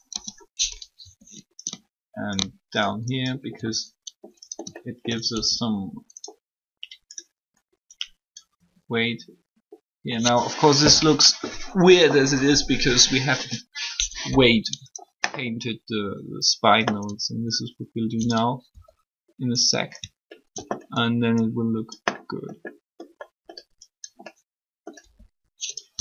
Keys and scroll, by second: 3.5 r, 5.3 alt+shift+r, 8.5 r, 18.6 r, 25.0 r.